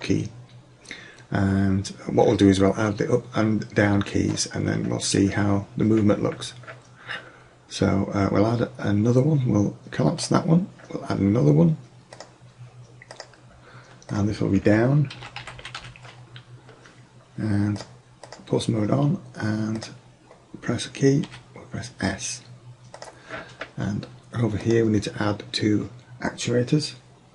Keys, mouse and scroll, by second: 4.6 middle click, 10.2-10.8 drag, 12.2 click, 18.3-21.7 drag, 23.0-23.4 drag.